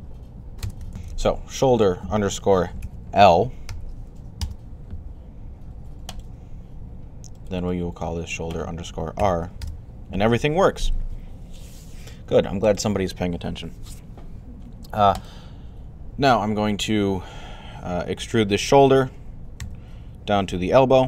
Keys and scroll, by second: 0.6-1.3 typing, 2.7-4.1 typing, 19.4 e.